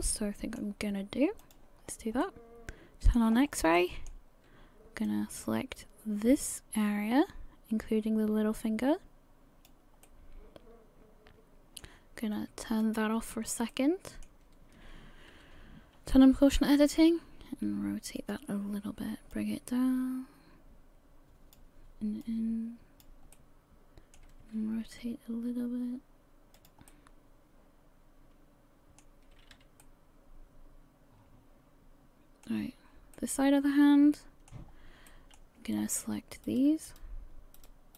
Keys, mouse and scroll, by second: 1.4 click, 1.8-2.2 scroll down 4, 2.2 middle click, 3.3 scroll up 3, 3.8 shift+middle click, 5.1 click, 10.0 middle click, 12.8 click, 13.4-13.7 scroll up 1, 13.7 middle click, 15.3 r, 19.3 click, 22.2 click, 23.4 middle click, 24.8 r, 26.9 middle click, 29.4 a, 29.6 a, 29.8 middle click, 33.2 middle click, 34.7 scroll up 2, 35.1 shift+middle click, 35.8-36.3 scroll up 1, 36.5 right click, 36.9 shift+right click, 37.7 shift+right click.